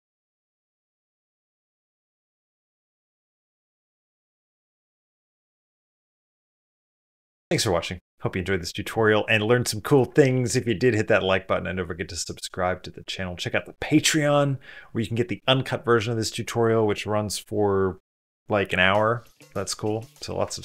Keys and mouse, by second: 0.6 space, 1.9 click, 3.7 click, 5.8 g.